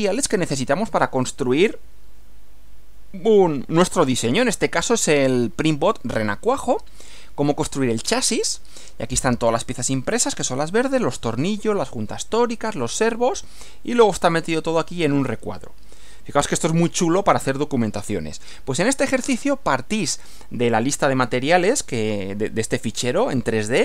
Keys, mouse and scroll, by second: 19.2 Right.